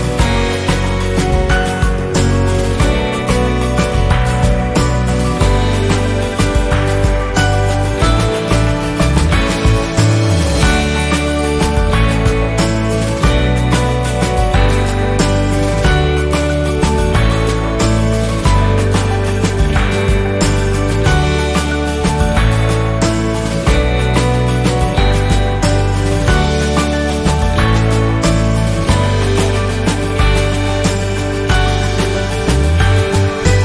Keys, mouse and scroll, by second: 1.2 click, 2.1 Delete, 3.0-6.2 drag, 6.2 shift+scroll down 1, 7.0-10.4 drag, 10.4-11.9 drag, 12.8 Up, 18.2-20.8 drag, 20.8-24.9 drag, 24.9-26.2 drag, 26.2 z, 26.6 click, 28.1 click, 28.8 F10, 29.8 click, 31.3 Delete, 32.4 click, 32.5 click.